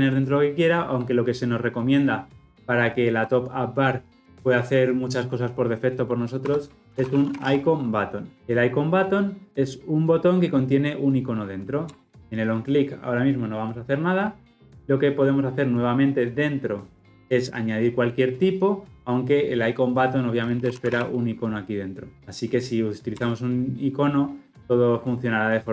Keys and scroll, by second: 23.2 Return.